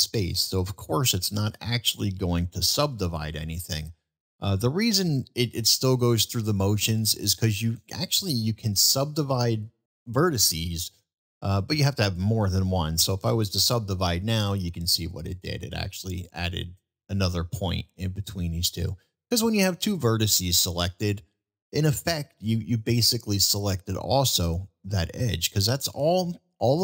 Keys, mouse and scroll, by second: 2.8 ctrl+z, 4.5-5.0 middle drag, 6.5-6.9 shift+drag, 7.7 shift+drag, 8.4-8.9 middle drag, 10.1-10.7 middle drag, 14.1 middle click, 14.1 s, 22.3 middle drag, 26.7 middle drag.